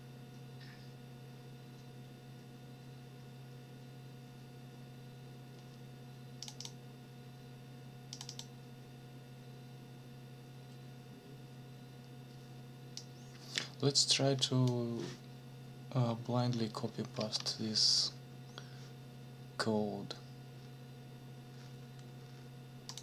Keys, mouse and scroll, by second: 6.4 click, 8.1 click, 13.0-14.8 drag, 17.2 ctrl+c, 22.9 click.